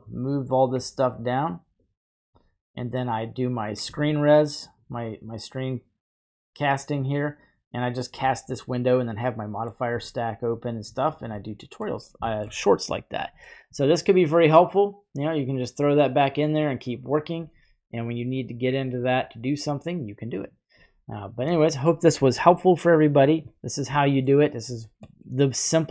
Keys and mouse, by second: 1.8 click, 3.0 click, 9.3 middle click, 10.0-10.7 drag, 11.0 right click, 11.4-11.8 middle drag, 12.3 shift+middle click, 12.8-13.4 middle drag, 16.1 click, 22.2 middle click, 23.6 middle click, 25.2 middle click.